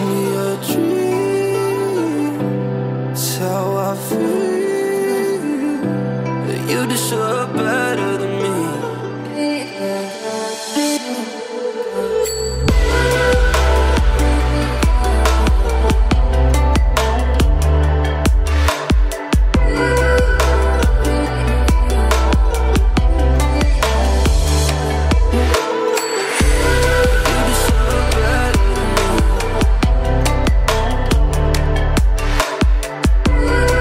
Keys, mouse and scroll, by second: 10.8-11.9 drag, 13.3-16.4 drag, 20.9 click, 22.9 alt+scroll down 1, 23.0 alt+scroll up 1, 23.3 alt+scroll down 1, 24.3 click, 26.7 alt+scroll down 1, 27.0-27.3 alt+scroll up 1, 27.7 space, 27.7-28.1 click, 28.1-28.5 alt+scroll up 1, 28.5 alt+space, 28.6-29.0 click, 29.2 alt+scroll up 1, 30.0 right click, 30.4 click, 30.8 space, 30.9 click, 31.3 alt+scroll up 1, 32.5-33.8 drag.